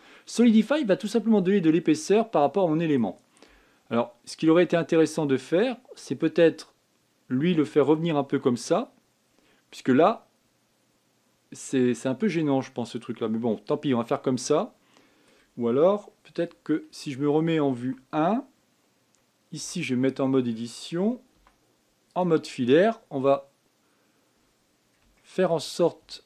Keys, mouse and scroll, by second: 0.3-1.4 middle drag, 1.4 scroll up 3, 1.8-7.7 middle drag, 10.0 scroll down 4, 10.5-13.5 middle drag, 16.7 scroll down 2, 18.5 KP_1, 20.3 Tab, 22.1 z, 25.5 scroll down 3, 25.9 shift+middle click.